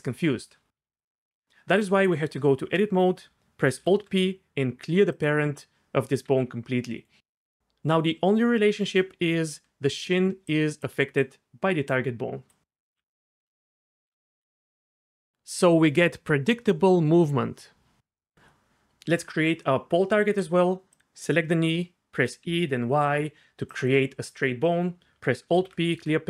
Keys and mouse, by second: 0.8-1.4 d, 1.0 click, 1.7 Tab, 3.8 alt+p, 6.2 g, 7.0 click, 7.6 ctrl+z, 7.6-12.8 d, 8.1 click, 11.2 click, 13.5 Tab, 13.5 d, 14.5 g, 19.1 Tab, 20.9 click, 22.1 e, 22.4 y, 23.7-24.7 drag, 25.5 alt+p.